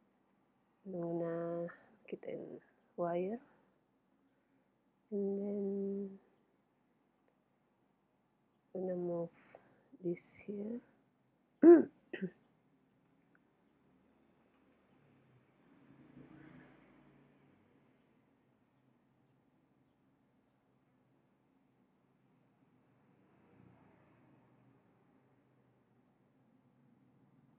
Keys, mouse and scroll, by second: 0.4 z, 8.6 g, 11.3-13.2 drag, 13.2 middle click, 17.9-19.5 drag, 24.5-26.3 drag.